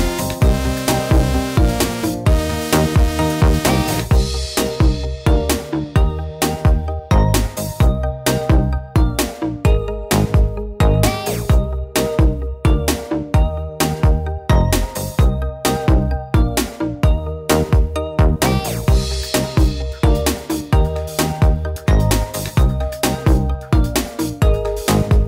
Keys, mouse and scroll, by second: 0.4 n, 0.8-2.2 drag, 2.2-2.6 middle drag, 2.6 click, 4.0 click, 4.0 right click, 4.4 middle drag, 4.6-5.2 drag, 5.3 n, 6.3 click, 7.1 click, 7.7 click, 8.6 click, 8.8 middle click, 10.0 s, 10.7 click, 11.9 drag, 12.4 s, 13.6 click, 15.2 click, 15.7 middle click, 16.4 drag, 16.9-17.2 drag, 18.5 click, 18.9 middle drag, 20.2 click, 21.4 m, 21.8 click, 22.5 click, 23.0 m, 23.3 click, 23.8 m, 24.2 click.